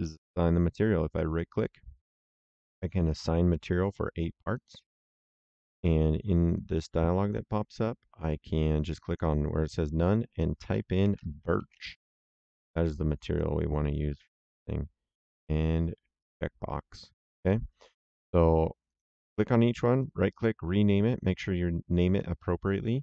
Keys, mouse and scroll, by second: 1.0 right click, 4.4 click, 6.4 click, 9.0 click, 10.7-12.1 typing, 13.2 click, 16.1 click, 18.8 click, 19.9 right click, 22.0 click.